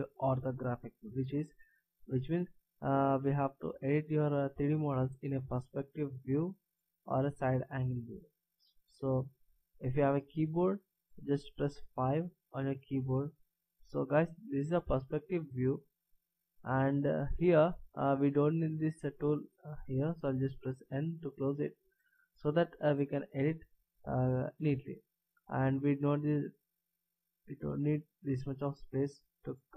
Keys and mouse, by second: 12.6 KP_5, 20.9 n.